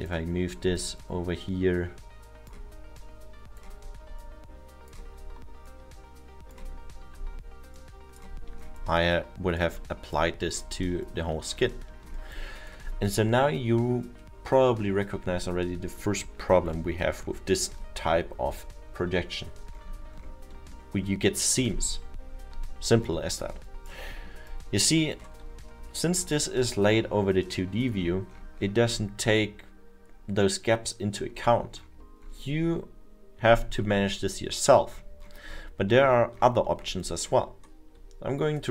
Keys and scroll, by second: 17.5 F2, 20.7 alt+7, 25.8 F1.